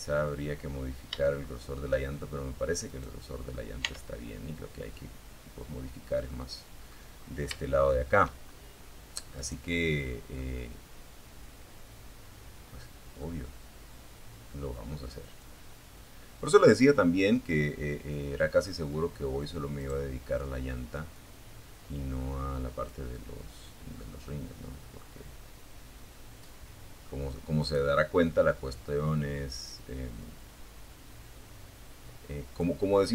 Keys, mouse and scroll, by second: 1.1 right click, 2.0 Tab, 4.5 middle click, 5.4-5.8 scroll up 1, 5.8 shift+middle click, 6.7 shift+scroll up 1, 7.6 right click, 8.2 scroll down 1, 8.6-11.6 middle drag, 13.6-17.0 drag, 18.0 right click, 19.3-21.2 drag, 22.3-25.6 middle drag, 25.8 right click, 26.5 middle click, 27.9 click, 28.8-29.5 scroll down 2, 31.7 right click, 33.0-33.1 drag.